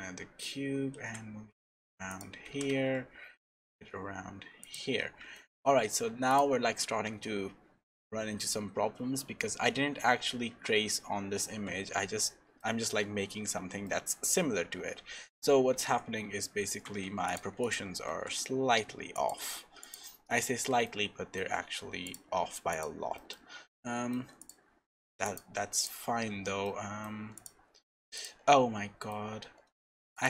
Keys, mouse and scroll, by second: 4.9-5.3 scroll down 4, 5.3 shift+middle click, 6.0-6.4 scroll down 2, 6.3 click, 10.3 Tab, 12.6 shift+middle click, 13.2-13.7 scroll up 7, 13.8 shift+middle click, 14.3-15.7 scroll down 4, 17.2 click, 18.0 s, 19.8 click, 20.3-20.7 scroll up 4, 20.8 shift+middle click, 21.6-21.9 scroll up 1, 22.0 click, 23.1 middle click, 23.4-23.8 scroll down 5, 23.7 middle click, 24.4 click, 26.3 Tab, 26.6 middle click, 27.3 click, 28.5 middle click, 29.3-30.0 scroll up 3, 30.1 shift+click.